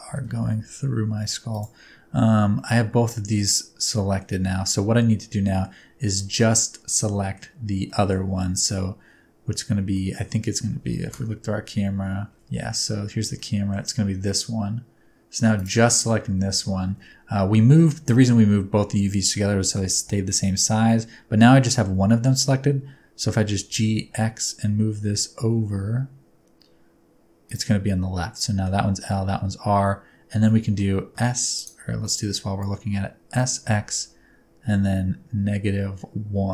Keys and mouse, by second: 0.0 g, 1.5 shift+click, 2.7-4.3 middle drag, 5.4 middle click, 6.1 middle click, 6.8 middle click, 7.9 middle click, 9.9 middle click, 11.0 KP_0, 13.4 middle click, 15.6 right click, 16.5 alt+z, 16.9 alt+z, 20.4 middle click, 21.7 shift+click, 22.0 middle click, 23.2 g, 23.9 x, 27.5 click, 28.0 middle click, 30.4 middle click, 31.1 s, 32.1 middle click, 33.3 s, 33.8 x.